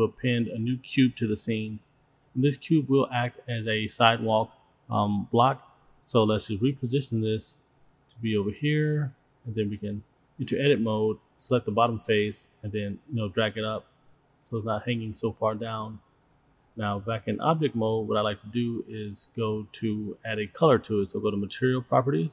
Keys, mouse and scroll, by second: 0.3-1.5 drag, 2.9 shift+a, 6.4-7.1 drag, 7.6 click, 8.1 click, 9.2 shift+middle click, 9.3 middle click, 9.6 click, 9.9 shift+middle drag, 10.4 scroll up 1, 10.5 middle drag, 10.8 click, 11.5 click, 12.5 middle drag, 12.9 click, 13.1 shift+middle click, 13.4 click, 13.6 click, 14.0 Tab, 14.1 middle click, 14.2 click, 14.3 middle click, 14.8 g, 17.3 Tab, 18.6-19.0 shift+middle drag, 22.2 click.